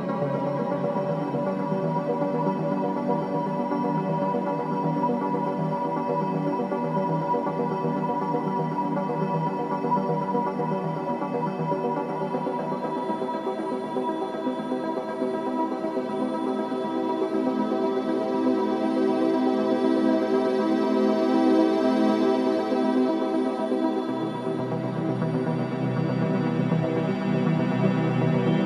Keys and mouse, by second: 0.2-0.8 ctrl+alt+drag, 1.1-1.4 alt+shift+drag, 2.0 click, 2.6-3.3 shift+drag, 3.9 ctrl+i, 5.1 Return, 9.7 click, 12.6 click, 14.4 ctrl+alt+click, 15.2 ctrl+alt+click, 16.1 click, 17.1 click, 19.8 click, 20.6-22.0 alt+drag, 22.7 Tab, 24.2 click, 25.0-26.5 drag, 26.5 middle click, 27.4 alt+click, 28.5 3.